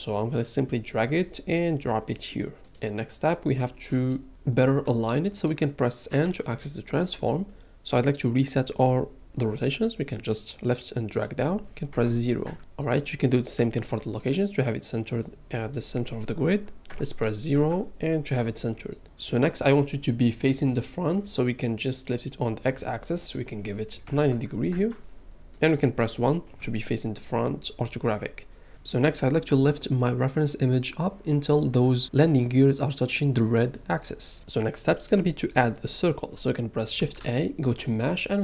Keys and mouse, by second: 6.1 n, 10.5-12.5 drag, 13.9 middle click, 15.3-17.6 drag, 18.5 middle click, 22.0 middle click, 23.0-24.7 middle drag, 26.5 KP_1, 37.0 shift+a.